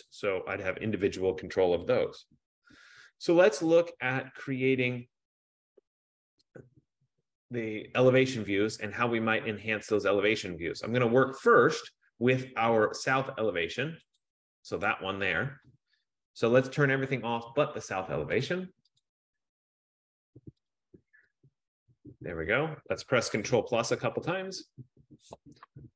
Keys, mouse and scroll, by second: 4.2-4.9 scroll, 5.1-5.9 scroll, 14.3 click, 15.1 click, 18.6 click, 19.3 click, 19.9 click, 20.9 click, 21.4 F15, 21.5 click, 24.2 ctrl+=, 24.4 ctrl+=, 25.1 ctrl+=.